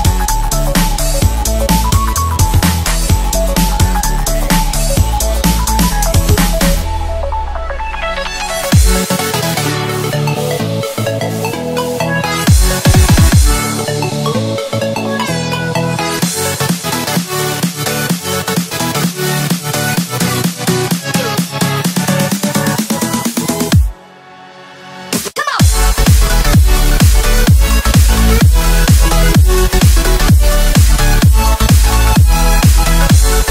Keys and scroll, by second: 4.7-6.2 typing, 8.4-9.2 typing, 10.4-12.7 typing, 11.6 alt+super+space, 11.6-12.0 alt+super+space, 16.2 i, 20.2 a, 22.0 i, 25.4 space, 25.9 super+space, 26.7 super+z, 27.7 space, 28.2 super+space, 28.3 super+space, 28.3 super+space, 28.4 super+space, 28.6 super+space, 28.6 super+space, 28.7 super+space, 28.9 super+space, 30.3 a, 30.9-31.7 space.